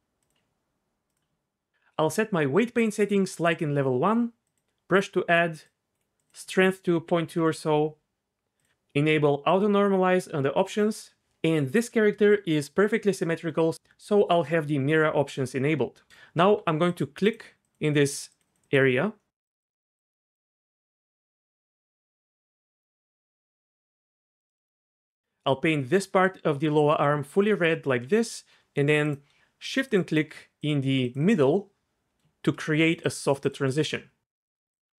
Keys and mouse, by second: 0.2 click, 1.0 click, 3.1-4.6 drag, 5.5 click, 6.1-7.3 drag, 9.5 click, 10.6 click, 16.4 f, 16.9 click, 17.2 click, 17.8 click, 18.4 click, 18.6 click, 19.5 click, 20.2 click, 20.5 click, 22.0 click, 22.8 click, 28.0 f, 29.0 click, 29.6 shift+click, 29.8 shift+click, 32.8 shift+click, 33.4 shift+click, 33.8 middle click, 34.2 z.